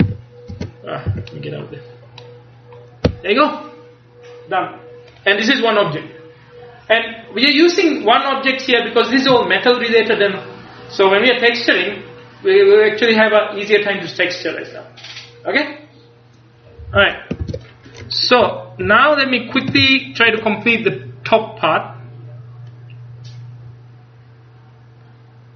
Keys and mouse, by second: 0.1 a, 0.6 Tab, 1.2 a, 17.5 ctrl+s, 18.9 KP_1, 19.9 ctrl+KP_3, 22.8-24.5 drag.